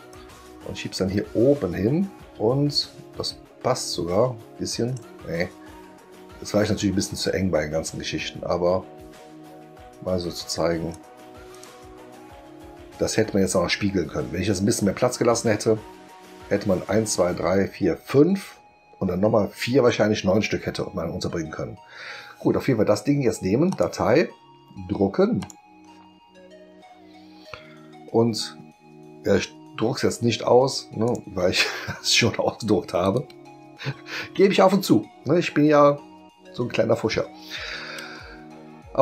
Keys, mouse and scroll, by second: 0.1-10.9 drag, 11.5 click, 23.7 click, 25.4 click, 31.0 click, 33.0 click.